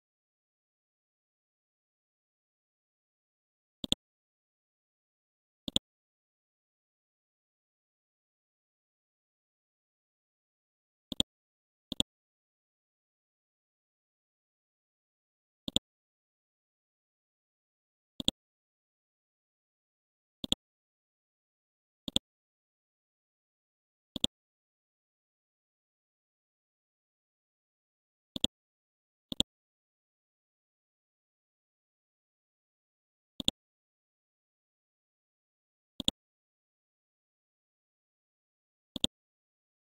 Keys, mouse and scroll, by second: 0.3 F12, 1.0 Tab, 1.3 KP_1, 3.0-3.7 scroll down 1, 3.8 ctrl+click, 4.3-5.2 scroll up 1, 5.2-5.7 scroll down 1, 5.7 click, 7.4-8.6 scroll down 1, 9.6-10.1 scroll up 1, 11.1 click, 13.0-13.8 scroll up 1, 14.0 Home, 15.6 click, 16.3 scroll down 1, 17.0-18.2 scroll up 1, 18.2-19.7 drag, 20.4 shift+click, 22.0 click, 24.1 shift+click, 25.5 shift+Up, 26.0 shift+Up, 26.1 shift+Up, 27.5 typing, 28.3-39.8 drag.